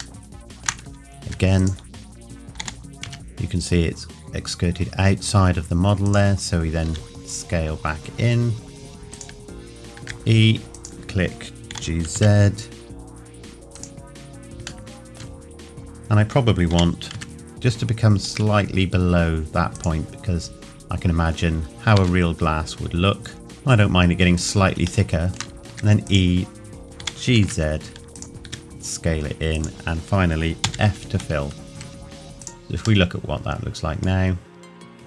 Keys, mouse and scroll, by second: 0.2 shift+middle click, 1.2 e, 1.6 click, 2.6 g, 6.0 click, 6.8 s, 10.0 e, 10.7 click, 11.7 g, 13.7 click, 14.1 scroll down 1, 14.9 shift+middle click, 15.5-16.7 scroll up 1, 16.7 g, 19.7 click, 21.9 s, 24.4 click, 25.1 shift+middle click, 25.6 scroll up 1, 25.7 e, 26.1 click, 27.0 g, 28.1 click, 28.4 s, 29.5 click, 30.6 f, 32.4 click, 33.0 middle click, 34.3 scroll down 1, 34.9 middle click.